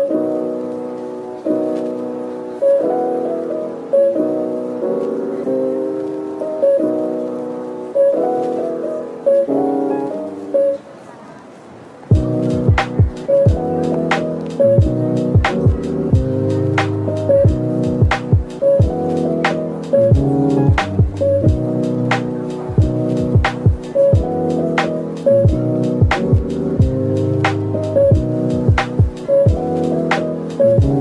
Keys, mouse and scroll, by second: 1.2 shift+a, 2.6-3.3 typing, 4.3-7.0 typing, 8.1-9.0 typing, 10.6-11.4 scroll up 1, 11.4-12.7 typing, 14.0 middle click, 15.8-16.8 typing, 17.9 typing, 19.8 Tab, 20.4 typing, 20.6 ctrl+b, 22.5 Tab, 22.7 scroll down 1, 23.0 middle click, 23.7 right click, 24.5 middle click, 25.3-26.3 typing, 27.9 Tab, 28.4 Tab, 28.8-29.1 scroll down 1, 29.1 middle click.